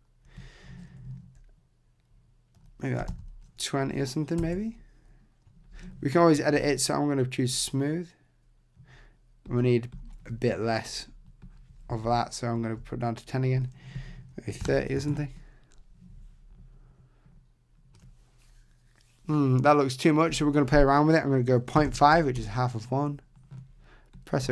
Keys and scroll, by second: 4.4 Tab, 12.0 shift+Down, 15.0 Tab, 22.4 Tab.